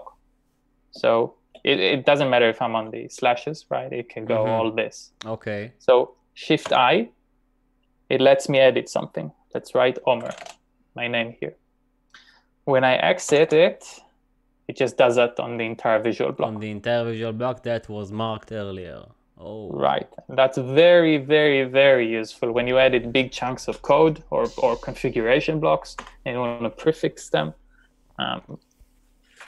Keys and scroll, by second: 2.1-4.1 typing, 6.7 l, 10.0-10.8 typing, 13.3 typing, 26.1 u.